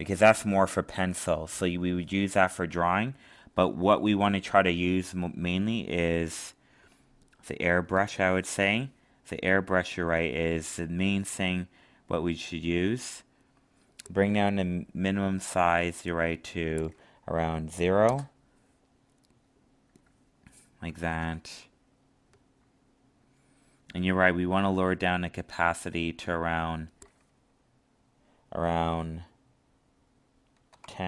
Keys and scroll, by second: 20.9 ctrl+z.